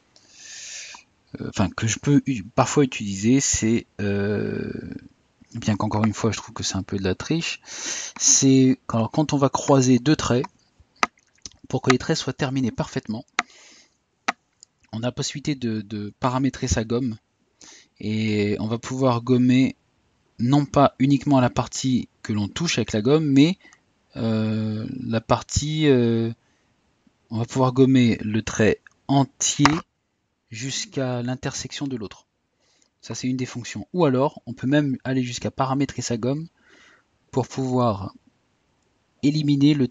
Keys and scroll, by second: 7.5 typing.